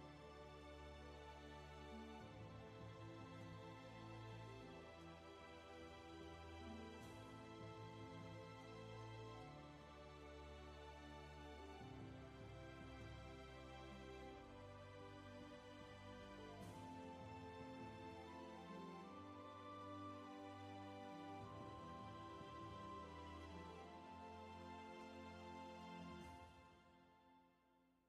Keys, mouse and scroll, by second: 7.1 ctrl+z, 8.9 ctrl+z, 11.0-12.8 scroll up 1, 12.8 ctrl+z, 16.8 ctrl+z, 19.7 space, 21.4-22.0 scroll down 1, 22.0 space.